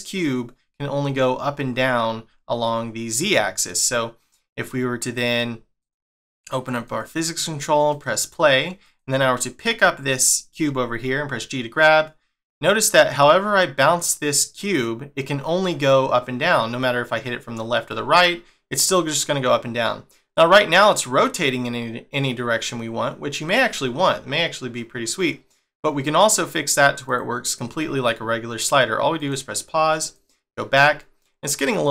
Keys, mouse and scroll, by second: 3.1 middle click, 5.3 click, 5.8 click, 6.7 click, 7.9 click, 8.8 click, 9.3 middle click, 10.7 g, 27.8 middle click, 29.2 click, 30.0 click.